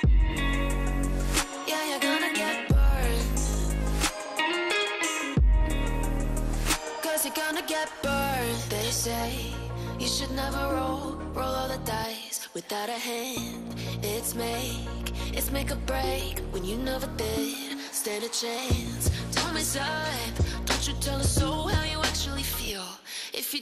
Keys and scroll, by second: 2.9 F3, 7.8 e, 7.9 Escape, 15.7 c, 16.3 F3, 16.8 Escape, 19.0 shift+F2, 20.4 F9, 23.4 Escape.